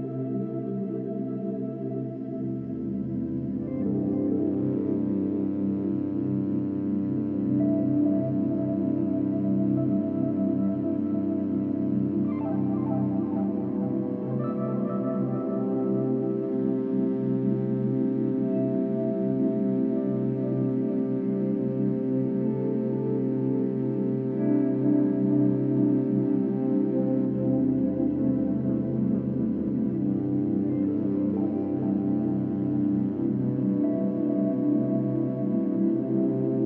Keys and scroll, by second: 25.5-25.9 space, 32.7 typing, 33.5 Return.